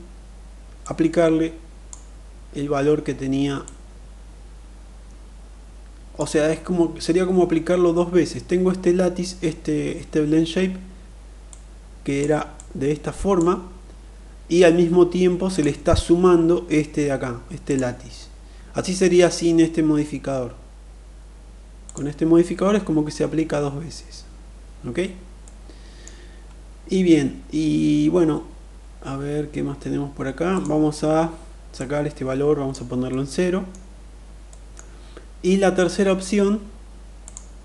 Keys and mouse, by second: 0.4-1.5 drag, 3.1-5.8 drag, 11.0-11.8 drag, 12.2-13.0 drag, 17.2 click, 21.4 click, 25.1-25.7 middle drag, 30.2 click, 31.4-32.4 drag, 32.7-33.3 middle drag, 33.9 middle click, 36.9 click.